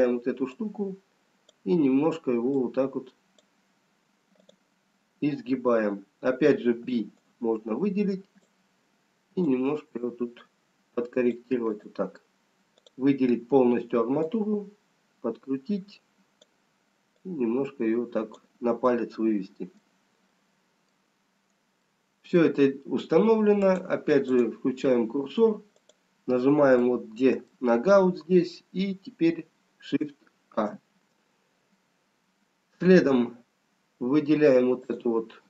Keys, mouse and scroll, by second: 1.5 click, 2.6 click, 4.4 click, 6.8 b, 9.5 click, 11.7 click, 16.3 click, 17.2 click, 19.0 middle click, 20.6 middle click, 21.9 middle click, 21.9 scroll down 1, 24.3 click, 27.1 middle click, 32.8 shift+a, 35.3 click.